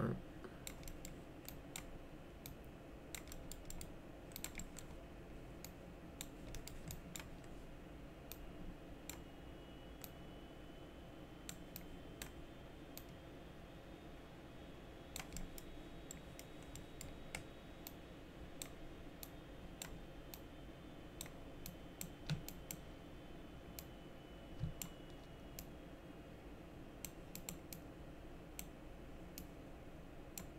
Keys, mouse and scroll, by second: 0.9 middle click, 1.5 click, 2.5 click, 3.3 middle click, 3.7 middle click, 4.4 click, 4.6 middle click, 5.6 click, 6.5 middle click, 6.9 ctrl+click, 8.3 click, 10.0-11.5 drag, 11.8 click, 13.0-15.2 drag, 15.4 middle click, 16.1 middle click, 16.8 middle click, 17.9 click, 19.2 click, 20.4 click, 21.7 click, 22.5 ctrl+click, 23.8-24.8 drag, 25.6-27.1 drag, 27.3 click, 27.7 click, 29.4 click.